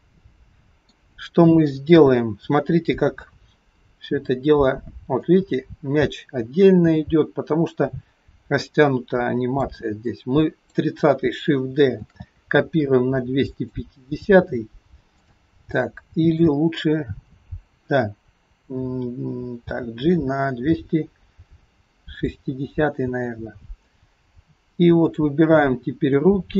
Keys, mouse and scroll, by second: 1.9 KP_4, 3.3 KP_3, 3.6-5.1 scroll down 4, 5.2 click, 10.1 click, 12.0 shift+d, 15.2 click, 15.8 click, 19.6 g, 22.9-24.6 scroll up 6, 25.2 click.